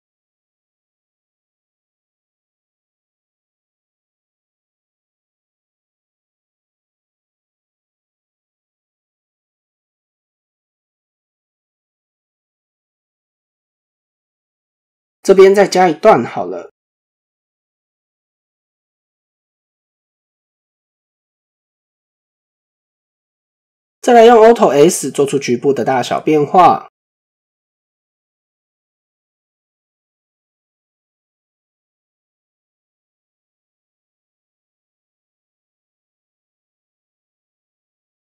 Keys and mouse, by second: 3.5 click, 4.1 shift+middle click, 4.6 click, 11.6 shift+middle click, 12.3 click, 14.6-16.1 drag, 16.8 click, 21.7 click, 22.4-22.7 shift+middle drag, 23.7 click, 24.7 shift+click, 29.1 shift+middle click, 37.1 click.